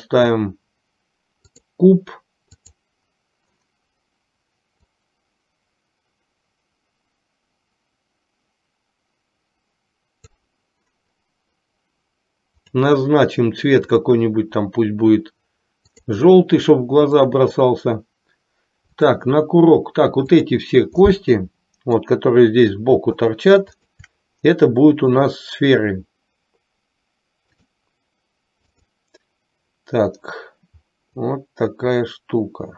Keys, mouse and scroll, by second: 5.3-10.3 drag, 12.7 click, 13.9-16.3 drag, 17.1 click, 19.1 click, 20.6 click, 21.2-22.2 middle drag, 23.2 shift+click, 23.9 shift+click, 25.2-27.8 drag, 28.8-29.4 drag, 31.2-32.7 drag.